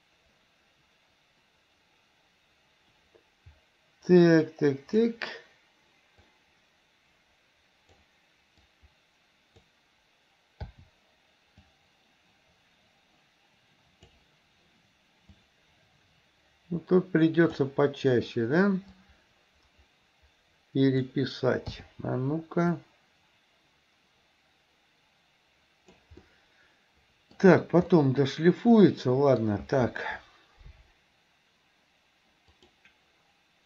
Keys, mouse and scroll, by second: 6.5-8.1 drag, 8.7-9.7 drag, 11.7-14.2 drag, 15.4-17.7 drag, 19.0-21.2 drag, 22.8-26.2 drag, 26.3-27.4 middle drag, 28.0-29.5 middle drag, 32.7 click.